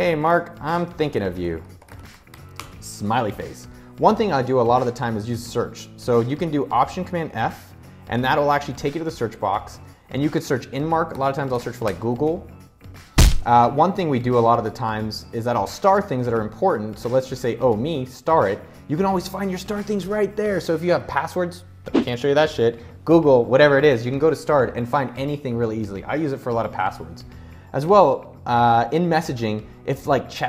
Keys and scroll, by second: 0.0-3.5 typing, 6.7 alt+super+f, 10.5-11.7 typing.